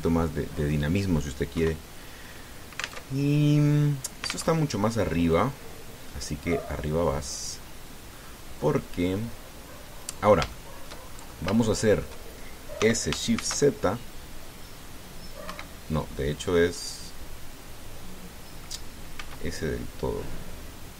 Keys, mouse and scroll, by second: 2.4 KP_1, 3.9 alt+Tab, 5.3 alt+Tab, 6.1-8.5 drag, 8.9-11.2 middle drag, 11.3 shift+middle click, 11.8-12.3 shift+scroll up 3, 12.4 shift+middle click, 13.6 s, 14.1 shift+z, 16.2 Escape, 17.4-19.6 middle drag, 19.9 s.